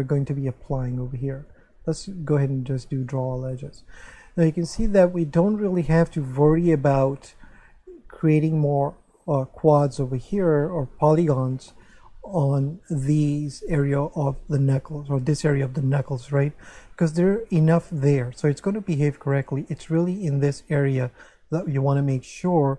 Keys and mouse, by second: 1.4 click, 2.9 click, 4.1 middle click.